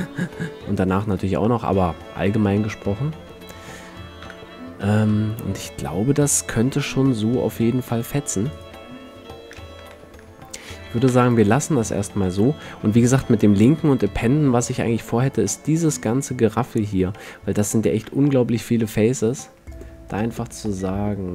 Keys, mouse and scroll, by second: 2.8-3.4 middle drag, 4.4 KP_5, 8.7-10.4 drag, 10.0 a, 10.6 click, 11.2 ctrl+s, 14.7 middle click, 17.3-19.2 drag, 18.0 a, 18.2 a, 19.9-21.3 drag.